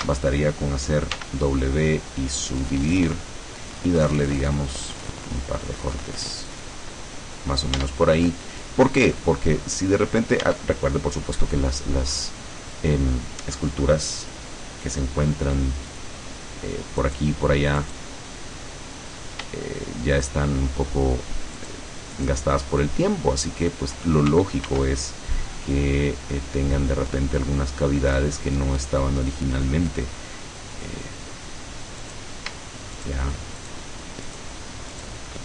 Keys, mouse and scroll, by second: 1.2 w, 2.9 click, 5.1 click, 6.5 click, 7.9 Tab, 8.4-9.5 middle drag, 10.5 Tab, 11.5-12.0 scroll up 2, 15.9 click, 17.1 right click, 17.9 right click, 18.8-19.3 scroll up 1, 20.2 shift+right click, 21.7 shift+right click, 22.2 shift+right click, 24.7 ctrl+r, 25.7 click, 29.3 click, 30.8 click, 32.1 right click, 33.1 shift+right click, 33.7 shift+right click, 34.4 shift+right click, 35.1 shift+right click.